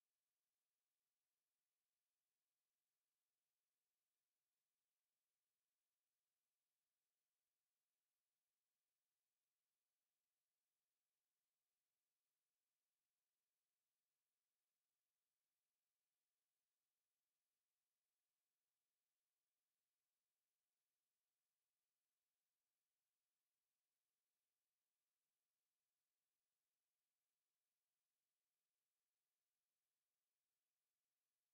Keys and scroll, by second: 15.4 ctrl+z.